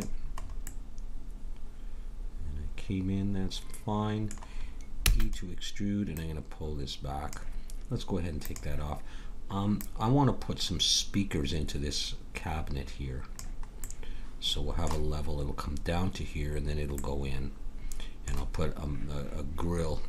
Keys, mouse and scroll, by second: 0.7-2.5 middle drag, 4.9 e, 6.1-7.9 drag, 8.6-11.5 drag, 13.8-19.4 middle drag.